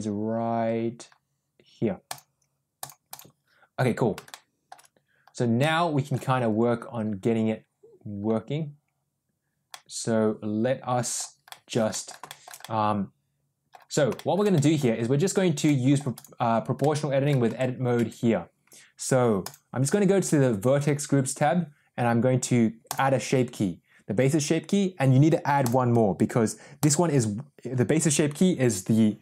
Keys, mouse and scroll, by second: 2.0 click, 2.8 click, 3.0 click, 5.5 middle click, 9.6-11.1 middle drag, 11.4 middle click, 11.8 middle click, 12.2 shift+middle drag, 12.5-13.7 middle drag, 14.0 shift+middle drag, 14.5 middle drag, 15.5-15.9 middle drag, 16.1 click, 16.7-17.2 middle drag, 17.4 Tab, 17.9 Tab, 19.3 click, 22.7-23.1 drag, 25.8 click, 26.7 click.